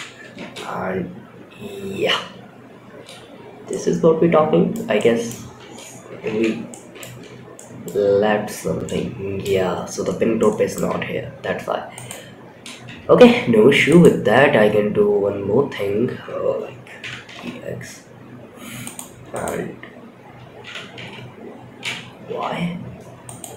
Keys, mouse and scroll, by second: 2.1-2.7 scroll down 1, 2.1 space, 2.7 scroll down 3, 3.0-4.0 middle drag, 4.3-4.6 middle drag, 5.6 shift+Left, 6.0 middle click, 6.5 Tab, 6.9 middle click, 7.3-8.1 scroll up 5, 8.1 shift+middle click, 9.0-9.4 scroll up 4, 9.7 shift+middle click, 11.2 click, 12.5 1, 13.2 click, 16.3 e, 18.6 click, 19.9 e, 23.2 click.